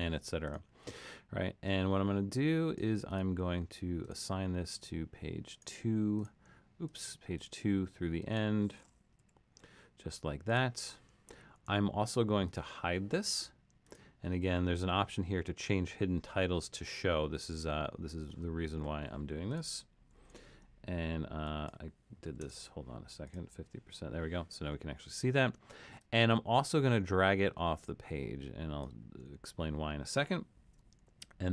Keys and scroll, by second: 9.2 2, 20.1 super+,, 22.0-22.9 typing, 31.1 alt+super+..